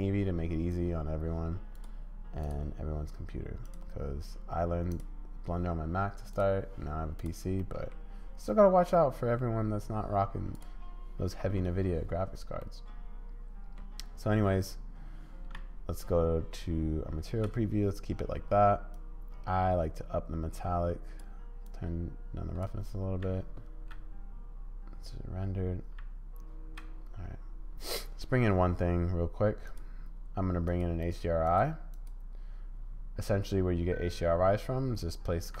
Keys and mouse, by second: 1.8 click, 3.7-5.0 drag, 6.3 click, 7.2 click, 7.7 middle click, 9.1 middle click, 10.6 click, 12.7-13.8 middle drag, 15.6 z, 18.9-21.2 drag, 21.6-22.7 drag, 23.2 z, 25.9 z, 30.6 click, 32.1-35.6 drag.